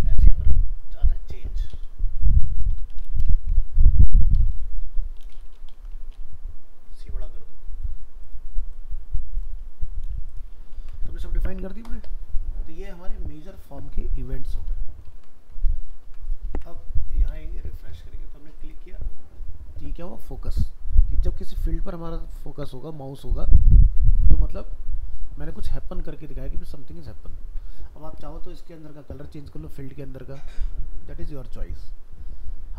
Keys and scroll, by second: 0.1 ctrl+v, 10.5 ctrl+s, 15.1 ctrl+s, 16.5 alt+Tab.